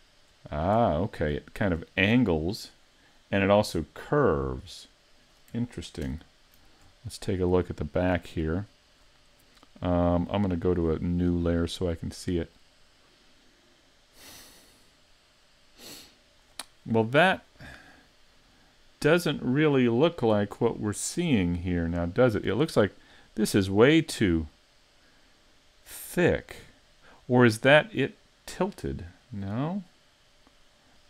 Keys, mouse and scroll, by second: 0.6 scroll up 1, 1.0 shift+middle click, 1.7-2.2 scroll up 1, 6.1 ctrl+KP_1, 7.2 shift+middle click, 8.6 shift+middle click, 10.7 click, 29.7-30.2 scroll up 2, 30.2 middle click.